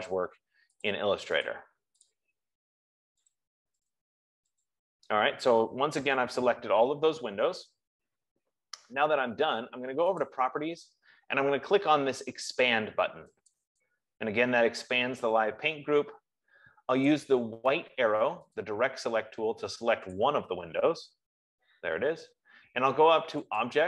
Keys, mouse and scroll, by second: 0.6 click, 1.5 click, 1.9 click, 3.7 click, 4.5 click, 10.8 click, 13.9 click, 17.6 click, 19.1 click, 19.6 F15, 20.6 click.